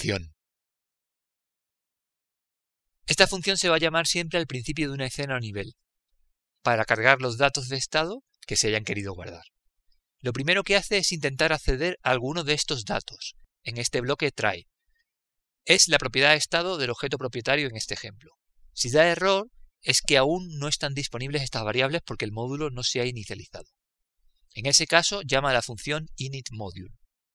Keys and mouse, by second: 11.7 click, 16.3 click, 21.1-23.5 drag, 25.8 click.